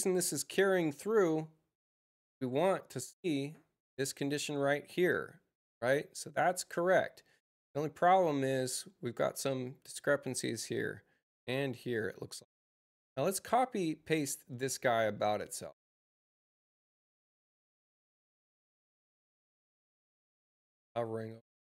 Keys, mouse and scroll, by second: 14.0 click, 14.8 c, 21.2 click.